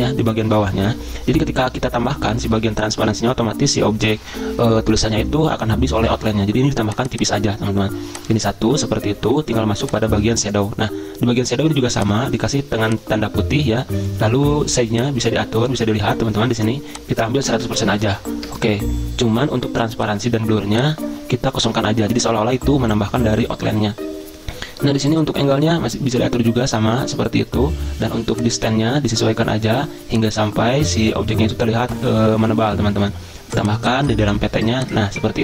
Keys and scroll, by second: 17.4-18.3 typing, 18.4 Return.